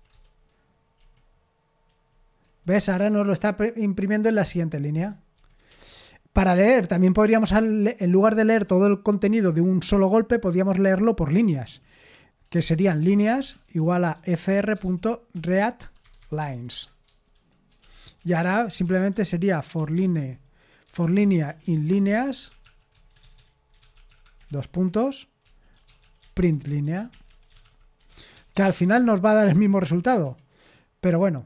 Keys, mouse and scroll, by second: 0.1 Return, 1.0 F5, 1.9 F5, 2.4 F5, 2.7 F5, 5.3 F5, 5.7 Escape, 6.0-9.2 typing, 10.9 k, 12.2-15.8 typing, 16.0 Tab, 16.4 Tab, 17.8 Tab, 18.6-29.4 typing, 30.2 F5.